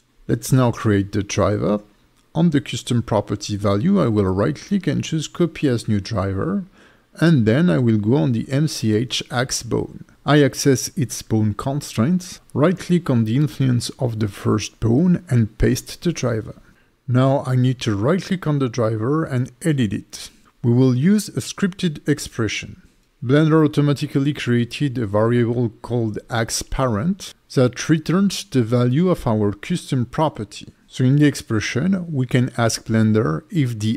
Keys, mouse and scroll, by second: 5.2 right click, 9.6 click, 10.1 click, 11.5 click, 14.6 right click, 18.5 right click.